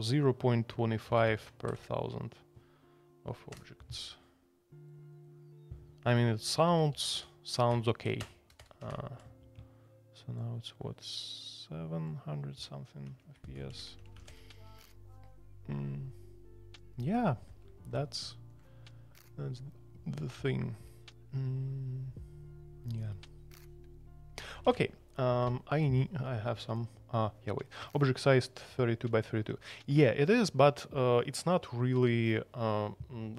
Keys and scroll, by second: 1.1 alt+p, 1.2 alt+p, 1.7 Return, 6.9 alt+p, 7.1 alt+p, 7.7-9.2 typing, 8.8 Escape, 13.0 Escape, 13.1-14.6 typing, 24.6 super+c.